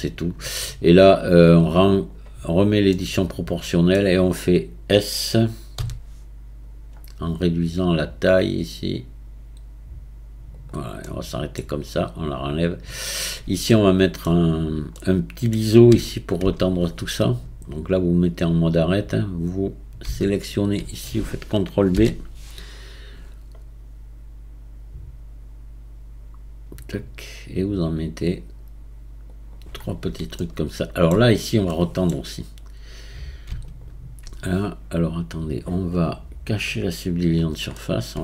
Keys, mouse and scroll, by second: 1.9 click, 2.9-5.8 middle drag, 5.8 s, 11.1-12.6 middle drag, 12.6 click, 13.1-13.7 scroll up 1, 13.7 scroll up 3, 13.7 shift+middle click, 14.5-14.9 scroll up 3, 14.9 middle click, 15.9 Tab, 17.1 Tab, 18.3-20.3 drag, 21.9 ctrl+b, 29.8-30.4 scroll down 2, 30.4-31.4 shift+middle drag, 31.4-31.7 scroll up 1, 31.7-33.6 middle drag, 33.6 alt+click, 37.1 click, 37.8-38.2 middle drag.